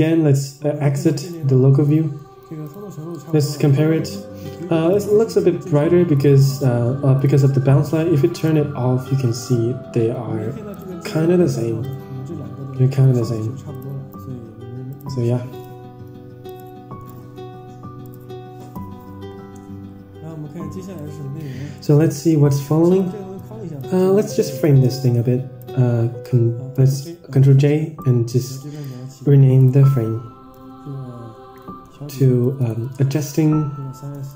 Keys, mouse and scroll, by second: 0.0-0.5 scroll up 4, 1.5 ctrl+shift+click, 5.1 click, 7.1 click, 8.5 click, 9.4 ctrl+shift+click, 10.8 ctrl+shift+click, 11.9 ctrl+shift+click, 13.0 ctrl+shift+click, 15.1 click, 16.8 ctrl+shift+click, 18.3 click, 18.7 ctrl+s, 20.9 Tab, 21.4 scroll down 6, 21.7-22.0 middle drag, 22.2 middle click, 22.9 click, 23.7 drag, 24.3 click, 24.9-25.5 drag, 26.8 ctrl+j, 27.9 click, 28.6-34.3 right drag.